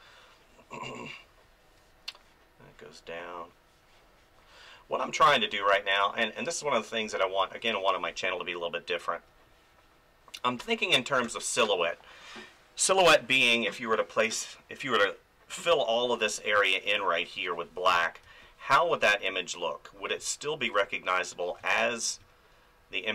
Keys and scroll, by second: 7.4 space, 17.9 ctrl+z, 18.2 space, 21.6 space.